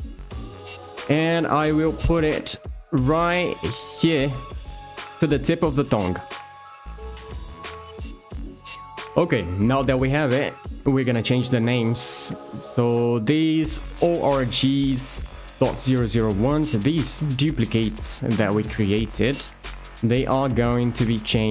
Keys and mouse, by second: 0.9 click, 2.2 g, 4.1 ctrl+click, 5.5 middle click, 10.3 shift+middle click, 17.3 alt+shift+click, 19.0 alt+shift+click, 20.8 alt+shift+click.